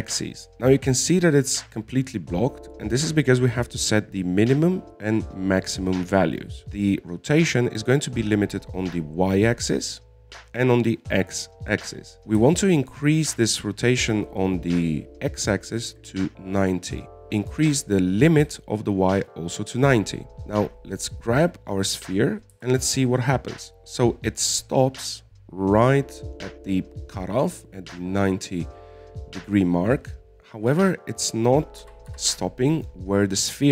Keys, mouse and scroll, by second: 0.5 click, 13.1-16.2 drag, 19.4-21.9 drag, 22.3 right click, 23.9 g, 32.3 scroll up 1, 32.4-33.2 scroll down 2, 33.2 g.